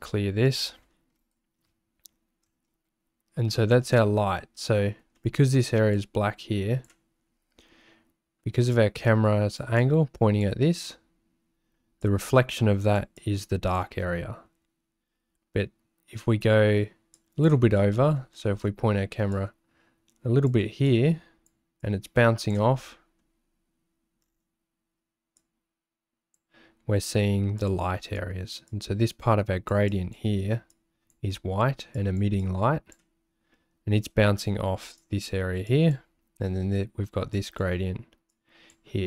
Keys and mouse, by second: 0.4 middle click, 5.2 shift+click, 5.9 click, 8.7 click, 9.8 click, 12.0 click, 13.2-17.4 drag, 18.0 shift+middle click, 19.3-21.5 drag, 21.8 click, 22.9 shift+click, 25.4 click, 27.6 click, 28.7-29.8 drag, 29.9 click, 30.9 click, 31.9 click, 32.4 click, 35.0 click, 35.7 click, 37.3 click, 38.3 click.